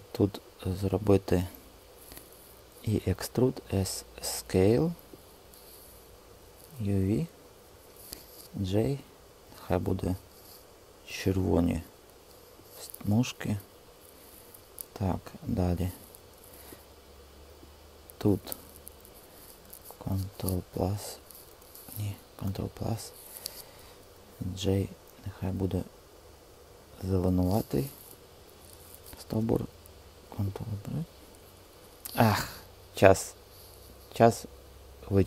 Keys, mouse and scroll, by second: 2.6-3.4 typing, 3.1 Return, 8.3 g, 20.4 ctrl+KP_Subtract, 21.7 super+z, 22.3 ctrl+KP_Add, 24.3 g, 30.5 super+click, 30.6-34.6 middle drag.